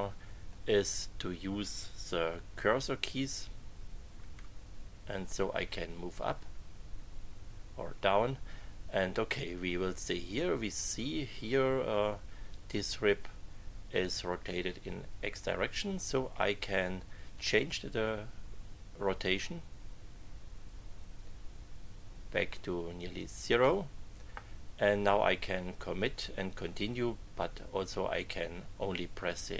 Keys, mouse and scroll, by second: 0.0 click, 4.2 Right, 5.4 Right, 6.7 Left, 17.3-23.9 drag.